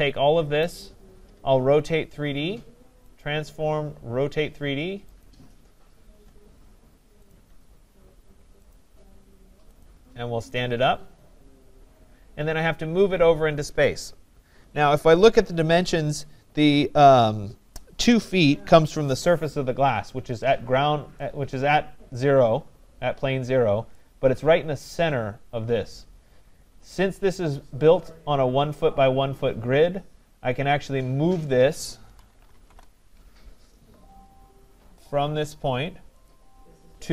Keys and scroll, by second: 32.6 Return.